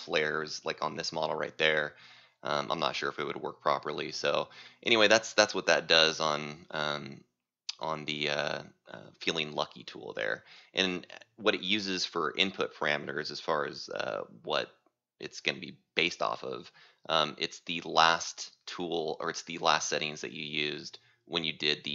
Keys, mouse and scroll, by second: 0.2 click, 1.2 right click, 2.2 click, 2.9 click, 3.9 click, 4.9 right click, 6.1 click, 7.0 click, 7.9 right click, 9.3 click, 10.7 right click, 14.5 click, 15.3 right click, 18.6 click, 19.1 right click, 19.7 c, 20.6 right click, 21.8 click.